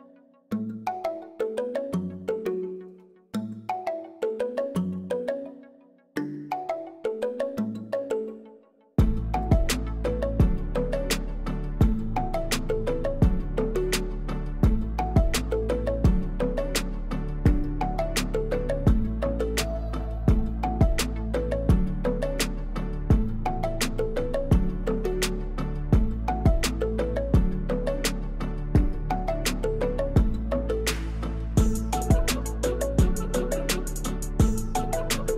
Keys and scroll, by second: 1.1 shift+z, 1.9 g, 2.0 z, 2.9 Escape, 3.3 m, 4.0 w, 4.1 a, 4.2 l, 5.4-5.8 typing, 6.6 ctrl+z, 7.8-8.6 typing, 15.4 Tab, 15.8 shift+s, 16.3 Tab, 17.2 shift+a, 18.6 ., 19.2 Tab, 19.5 s, 19.6 z, 20.9 Tab, 21.0 g, 21.2 z, 22.8 Tab, 23.7 s, 23.9 shift+z, 25.5 3, 26.0 i, 26.9 e, 29.8 ctrl+r, 31.5 ctrl+r, 33.1 2, 33.7 ctrl+b, 35.0 shift+z.